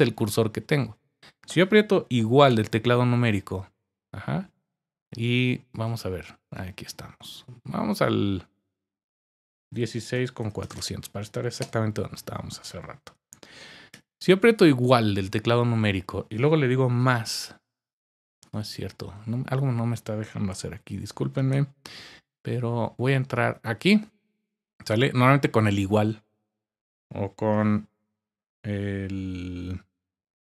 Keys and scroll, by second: 2.5 typing, 9.5-11.2 typing, 11.6 Return, 13.0-13.9 typing, 29.9 *.